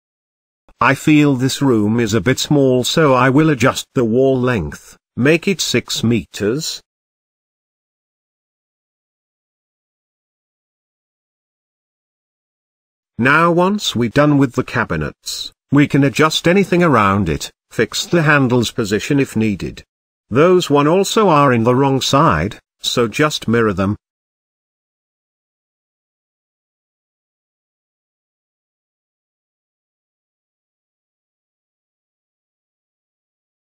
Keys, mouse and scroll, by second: 0.7-1.3 scroll down 6, 1.3-1.9 scroll up 1, 1.9 click, 2.6 n, 3.5-6.3 drag, 7.5-8.9 drag, 8.9 scroll down 2, 9.2-11.0 shift+middle drag, 11.1-12.6 scroll up 2, 12.6-13.0 scroll up 1, 13.1-13.7 shift+middle drag, 13.7 click, 14.5 n, 14.9 shift+middle drag, 15.1-15.8 shift+scroll up 3, 15.3 middle drag, 15.8 click, 16.2 shift+middle click, 16.8 KP_Decimal, 17.2-17.8 scroll down 3, 17.8 g, 18.9 click, 19.4 g, 20.2 scroll down 2, 20.5 shift+middle click, 21.3 click, 21.7 shift+middle click, 22.4 shift+click, 23.0 g, 25.6-27.5 drag, 27.5-27.8 scroll down 2, 27.8-29.4 shift+middle drag, 29.4 scroll up 2, 30.0 drag, 30.4 g, 31.5 click, 32.0 g, 32.8-33.1 scroll down 4, 33.1-33.7 shift+middle drag.